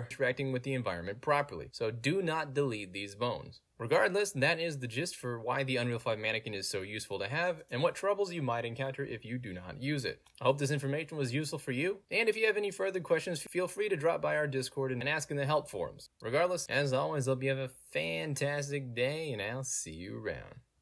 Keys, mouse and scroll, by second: 2.3 click.